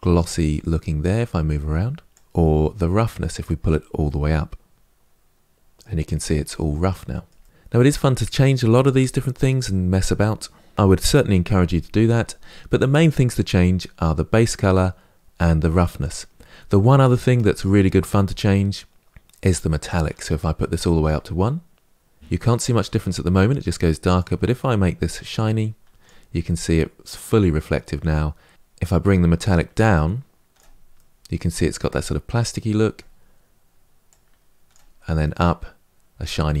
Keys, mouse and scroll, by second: 2.1-3.8 drag, 3.8-5.6 middle drag, 5.8-7.2 scroll up 5, 7.2 middle click, 7.4-19.6 scroll down 2, 19.6-21.8 drag, 21.8-24.4 middle drag, 24.4-26.2 drag, 26.2-29.3 middle drag, 29.3-30.7 drag, 30.7-33.9 middle drag, 33.9-35.0 drag, 35.0-36.6 middle drag.